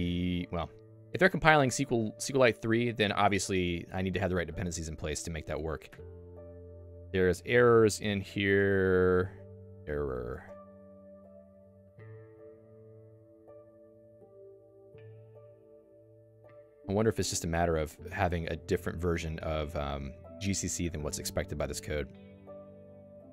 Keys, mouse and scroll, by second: 5.1 click, 5.6 Escape, 5.9 ctrl+u, 7.3-12.6 typing, 14.3 scroll up 2, 21.6 n, 22.0 n.